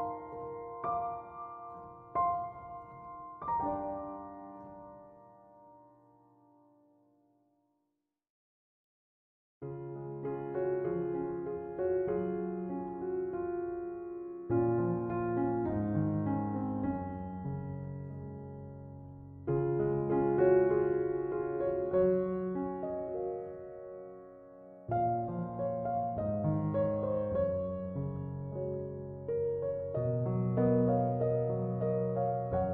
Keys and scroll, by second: 6.8-8.5 typing, 9.4 Return.